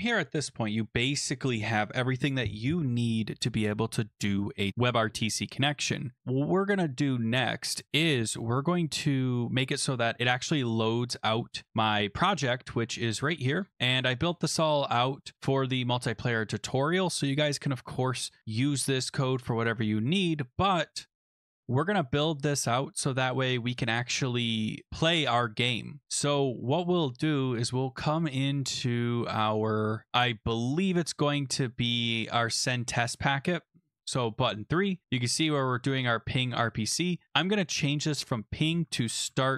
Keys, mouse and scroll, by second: 11.0 click, 11.5 scroll, 13.3 click, 13.6-14.7 scroll, 16.3 click, 18.7-19.8 scroll, 21.0 middle click, 22.3 middle click, 22.4 middle click, 22.5-23.9 scroll, 26.0 click, 31.2 click, 33.3 click, 34.6 click, 34.7 click, 36.6 click, 37.8 click, 38.0 click, 38.7-39.5 typing.